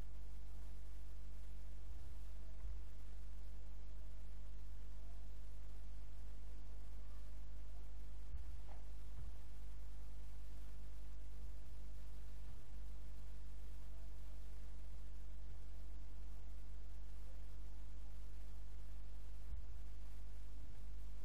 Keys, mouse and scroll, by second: 0.6 click, 1.9 g, 6.1 click, 8.4 g, 9.2 x, 11.5 g, 18.0 click, 19.6 g.